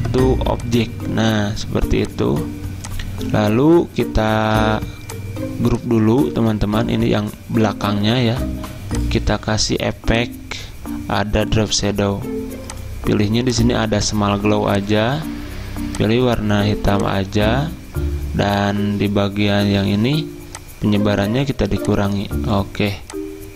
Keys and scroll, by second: 6.4 ctrl+z.